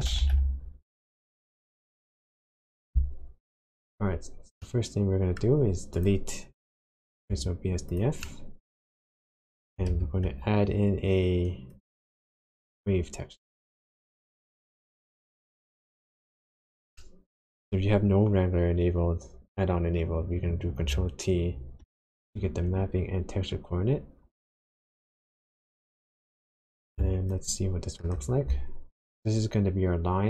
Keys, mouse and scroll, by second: 3.6 click, 4.6 middle click, 5.9 click, 7.3 x, 7.9 click, 8.2 middle click, 9.5 click, 9.9 shift+a, 17.0 middle click, 17.8-18.6 scroll up 1, 21.9 ctrl+t, 25.9 click, 27.4 ctrl+shift+click.